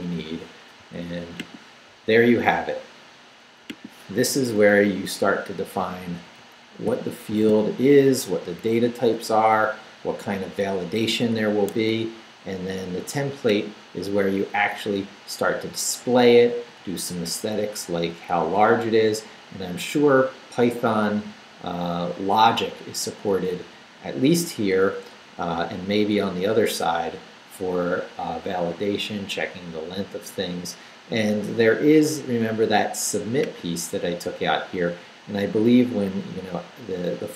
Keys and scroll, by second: 4.2 Up, 4.7 Down, 5.4 Down, 6.1 Down, 6.9 shift+Down, 7.3 shift+v, 7.8 shift+Down, 9.0 Up, 14.7 Up, 15.7 Left, 16.5 Right, 18.4 Left, 21.2 Down, 22.0 Up, 24.3 Down, 24.9 Up, 25.7 Down, 26.3 Up.